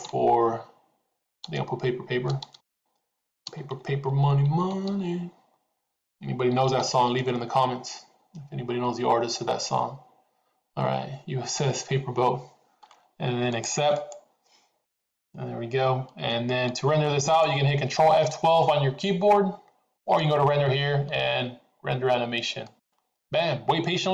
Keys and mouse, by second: 17.3 click, 20.0-24.1 drag.